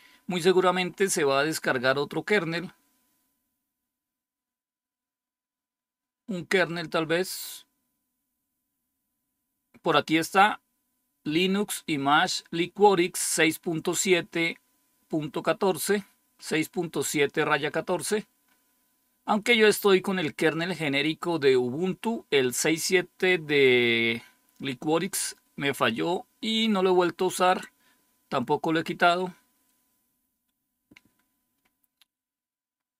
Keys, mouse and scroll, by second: 0.7-3.2 scroll up 4, 3.8-6.1 scroll down 2, 6.1-6.9 scroll down 1, 6.9-17.5 scroll up 2, 17.5-31.2 scroll up 1, 31.2-32.9 scroll down 3.